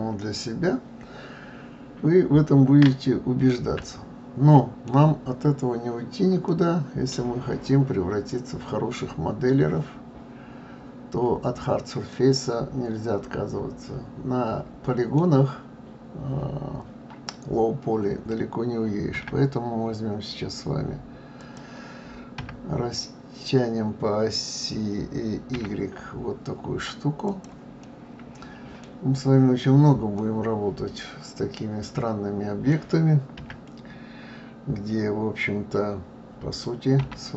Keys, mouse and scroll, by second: 2.2-2.9 scroll down 2, 2.9-5.2 middle drag, 5.2-5.6 scroll down 2, 5.9 scroll up 1, 6.4-9.5 middle drag, 12.1-15.1 middle drag, 19.1 s, 22.4 s, 27.8-29.0 middle drag, 29.0 scroll down 2, 30.2-33.2 middle drag.